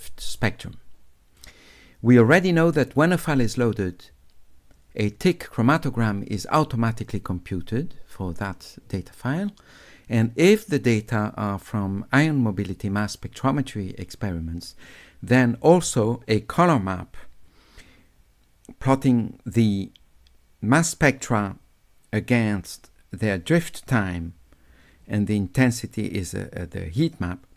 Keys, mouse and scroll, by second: 1.4 click, 1.5 scroll up 2, 5.7 middle click.